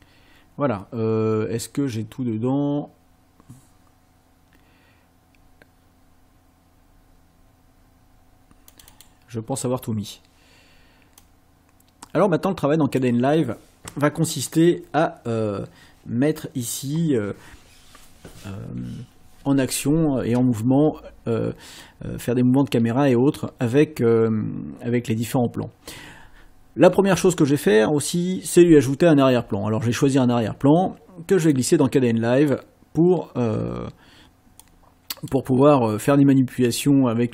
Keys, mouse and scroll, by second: 8.7 click, 11.2-13.1 drag, 31.5-32.7 drag, 34.6 click.